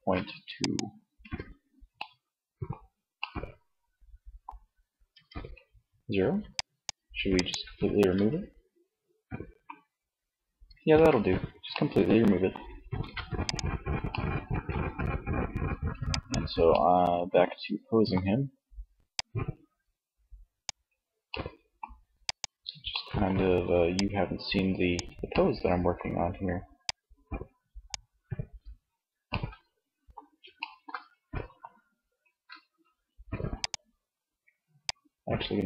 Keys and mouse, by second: 0.3 Tab, 4.1 Tab, 7.4 Tab, 10.1 ctrl+Tab, 12.0 ctrl+s, 16.8 middle click, 17.6 middle click, 18.3-19.9 drag, 20.2 middle click, 22.9-23.9 middle drag, 23.9 click, 24.3-27.6 middle drag, 32.8-34.8 middle drag, 34.8-35.6 drag.